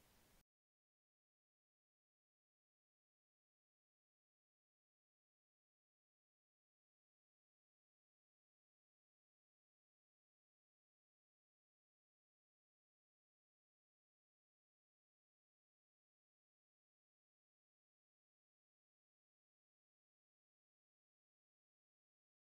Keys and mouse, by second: 0.0 middle click, 0.6 click, 2.2 click, 3.1 r, 7.4 click, 8.5 g, 10.6 click, 11.1 g, 13.0 g, 13.7 Tab, 13.9 a, 15.0 alt+g, 15.0-17.3 alt+middle drag, 15.3 alt+r, 15.5 alt+s, 16.9 KP_1, 17.5 click, 18.4 ctrl+middle click, 18.5 ctrl+s, 19.2-19.7 middle drag, 19.8 middle click.